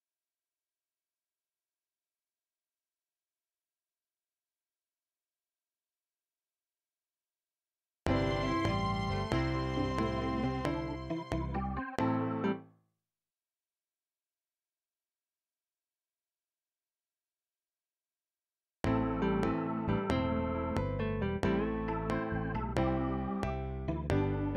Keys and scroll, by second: 7.9 space, 12.5 space, 18.7 space, 22.1 ctrl+x.